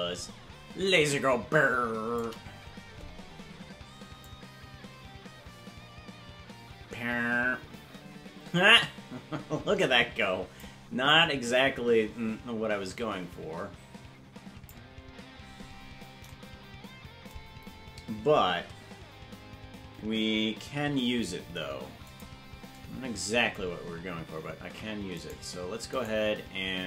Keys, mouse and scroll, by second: 4.2-10.6 drag, 11.1-14.7 drag, 15.7-16.0 scroll up 5, 20.7 shift+d, 24.5 ctrl+Tab, 26.0 right click.